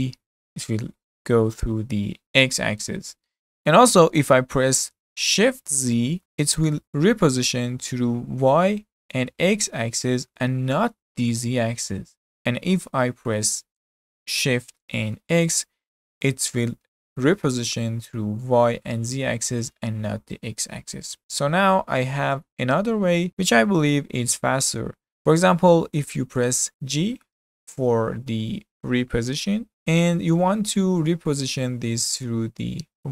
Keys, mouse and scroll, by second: 27.0 g.